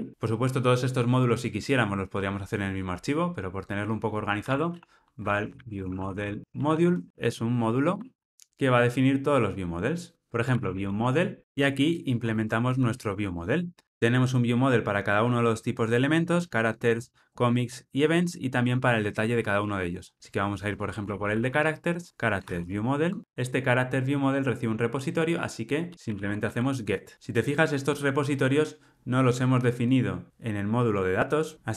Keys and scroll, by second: 8.5 Return, 10.3 super+z, 11.4 alt+Return, 23.2 super+p.